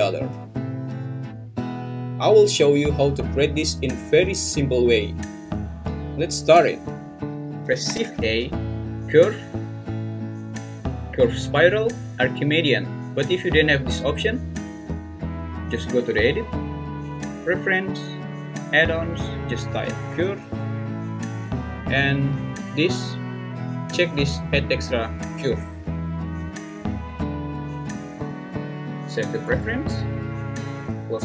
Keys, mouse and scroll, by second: 7.8 shift+a, 16.4-17.8 drag.